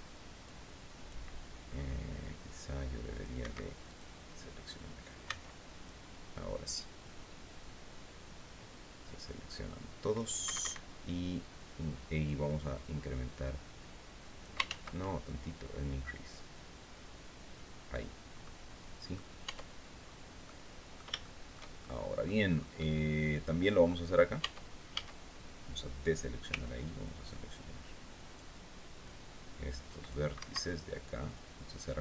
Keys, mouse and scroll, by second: 2.6 click, 2.9 Escape, 3.3 click, 4.7 c, 5.3-9.8 drag, 9.9 Escape, 11.7-14.1 drag, 14.1 ctrl+z, 14.7-17.6 ctrl+drag, 17.9 click, 18.9 Tab, 19.5-19.8 scroll down 2, 19.9 click, 20.7 shift+click, 21.5 click, 21.9 scroll up 2, 23.8 Tab, 24.4 a, 25.9 c, 26.5-28.0 drag, 28.5-29.8 drag, 29.9 Escape, 30.2-32.0 drag.